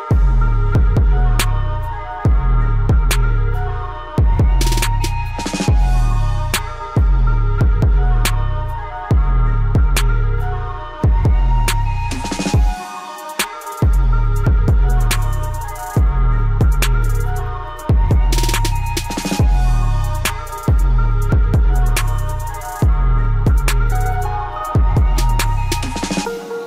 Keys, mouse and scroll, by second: 1.5 click, 2.3 scroll down 1, 2.4-6.0 drag, 11.9 click, 13.0-13.3 scroll down 1, 14.0 scroll up 1, 14.7 click, 14.8-19.3 ctrl+shift+drag, 22.5-23.4 typing, 23.5 click.